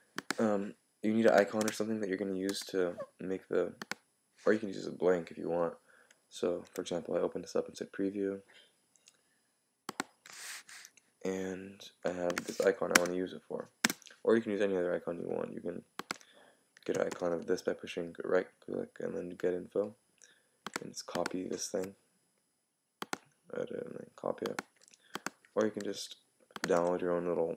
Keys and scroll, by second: 17.1 super+i.